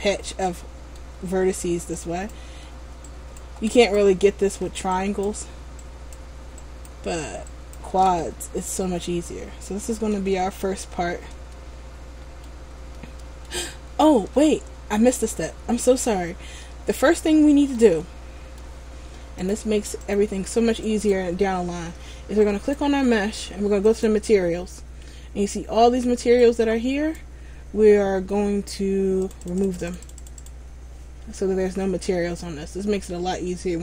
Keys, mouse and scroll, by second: 2.1 alt+right click, 3.2 alt+shift+right click, 3.9 right click, 5.1 alt+shift+right click, 8.4 middle click, 10.9 scroll up 1, 11.7 shift+middle click, 13.1 middle click, 14.4 a, 15.3 middle click, 16.3 scroll down 1, 17.2 shift+middle click, 17.2-17.5 scroll down 4, 18.2 middle click, 19.5 click, 21.0 right click, 24.0-31.9 click, 31.9 scroll up 1.